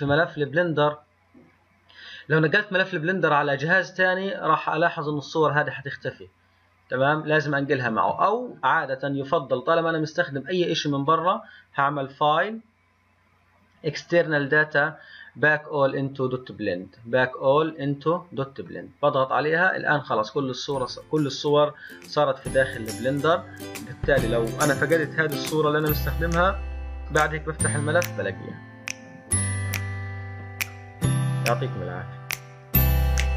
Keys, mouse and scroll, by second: 11.1-14.2 drag, 27.1-30.0 middle drag, 30.0 click, 30.7-33.3 middle drag.